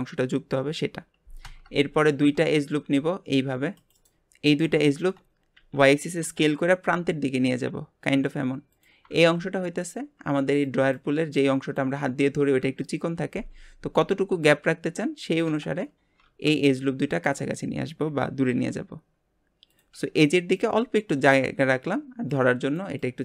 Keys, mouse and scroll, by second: 2.6 ctrl+r, 4.4-4.8 scroll up 1, 4.8 shift+middle click, 5.5 s, 18.1 s.